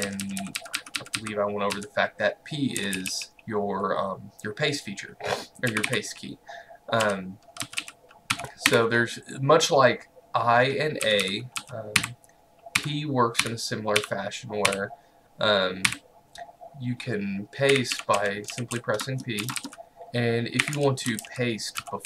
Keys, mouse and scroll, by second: 0.0-3.3 typing, 5.7 typing, 7.1-8.7 typing, 10.9-14.7 typing, 15.9 typing, 17.5-22.0 typing.